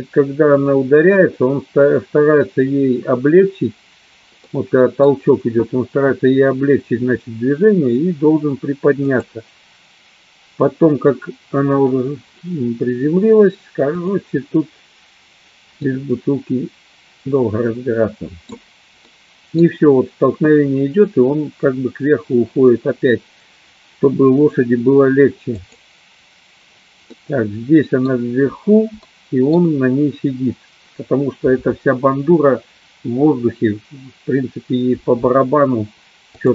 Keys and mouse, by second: 4.6 middle click, 9.6 click, 14.6 click, 16.0-18.5 middle drag, 19.3 middle click, 26.1 click, 27.3 middle click, 29.1 middle click.